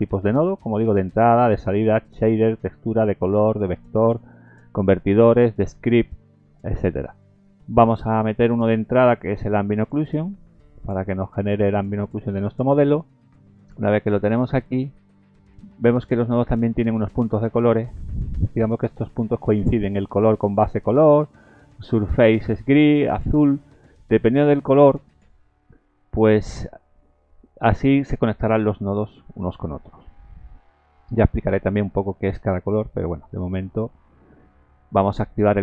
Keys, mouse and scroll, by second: 11.2-11.7 scroll up 4, 12.8 shift+middle click, 14.8 middle click, 25.1-25.6 scroll down 3, 25.7 middle click, 27.1-27.7 scroll up 2, 29.3 scroll down 2, 29.8 middle click, 31.0-31.7 scroll up 4, 33.0 middle click.